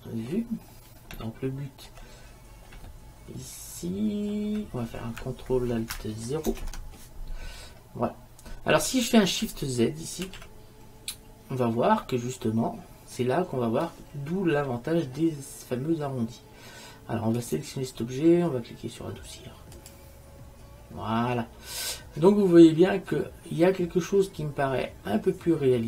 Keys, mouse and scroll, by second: 0.7-2.3 middle drag, 2.5-3.2 middle drag, 10.5 shift+z, 17.5-19.3 right drag, 19.9 click, 20.1-21.6 drag, 22.7 middle click.